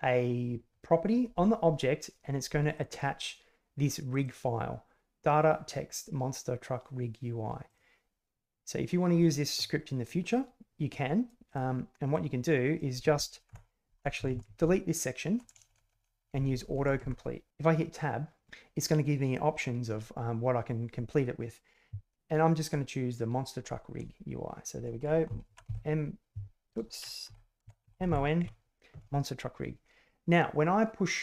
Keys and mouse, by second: 2.7 click, 4.1 click, 7.7 click, 10.4 click, 13.5-17.0 BackSpace, 17.5 Tab, 25.4 o, 25.6 n, 27.2-28.1 typing, 28.4 Tab.